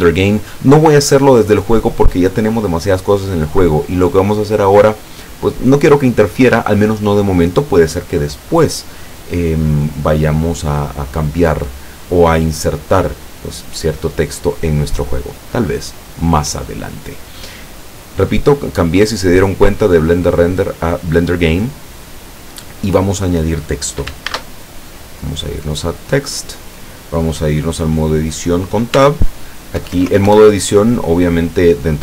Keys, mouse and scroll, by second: 0.2 click, 19.1 click, 21.2 click, 24.4 shift+a, 26.0 click, 29.0 Tab, 29.8 BackSpace.